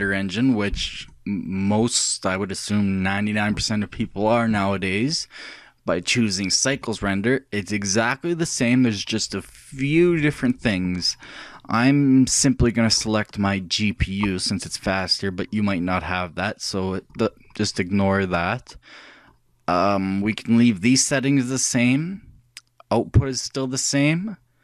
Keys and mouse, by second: 1.1-3.2 drag, 13.0-14.9 drag, 17.1-19.1 drag.